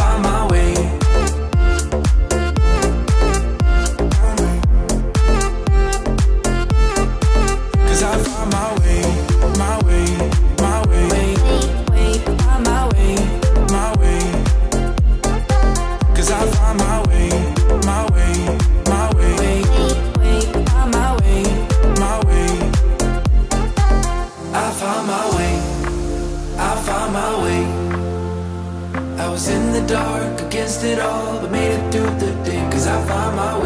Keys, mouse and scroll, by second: 2.3 click, 8.8 click, 10.1 click, 17.8 click, 28.0-30.0 drag, 30.0 typing.